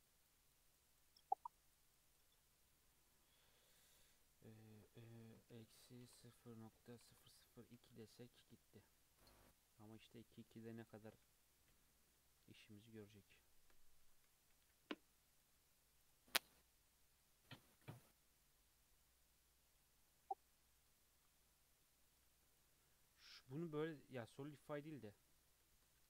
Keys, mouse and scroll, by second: 0.0 click, 0.2 click, 0.5 click, 0.7 click, 0.9 click, 1.1 click, 1.3 click, 1.5 click, 1.7 click, 1.9 click, 2.1 click, 2.6 click, 3.7-6.7 drag, 7.1 KP_0, 9.4 click, 9.6-10.0 scroll down 4, 10.0-10.8 middle drag, 10.8 click, 11.7 /, 12.2 middle click, 12.8 scroll up 2, 13.3-14.3 shift+middle drag, 14.3 g, 15.7-16.0 scroll down 1, 16.0 click, 16.3 scroll down 2, 16.6-19.6 middle drag, 20.0 scroll down 2, 20.2-21.1 middle drag, 21.1 scroll up 2, 21.4-22.5 middle drag, 22.5 click, 24.8 click, 25.7 Tab.